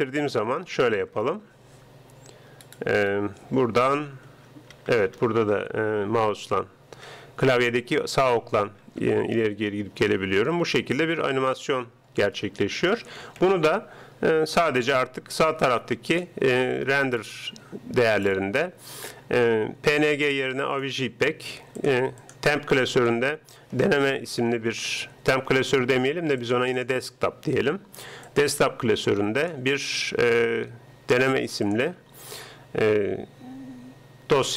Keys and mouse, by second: 1.0 ctrl+Up, 4.4 Right, 4.8 Right, 5.0 Right, 5.2-7.1 Right, 7.6-8.8 Right, 9.3-11.4 Left, 11.9 Escape, 12.5 Escape, 13.4 ctrl+Up, 16.2-17.9 drag, 20.0-21.7 drag, 21.9-23.5 drag, 29.6-31.2 drag, 31.7-33.4 drag.